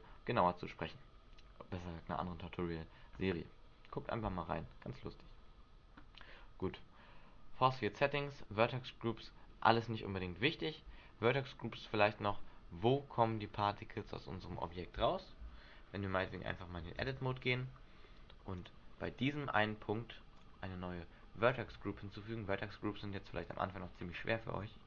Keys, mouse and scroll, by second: 12.2-12.7 scroll up 9, 13.3-13.9 scroll down 4, 14.1 scroll down 2, 15.6 Tab, 16.4-16.9 scroll up 4, 17.2 Escape, 17.7-18.2 scroll up 2, 18.7 right click, 20.5 click, 21.6 click, 23.5 click.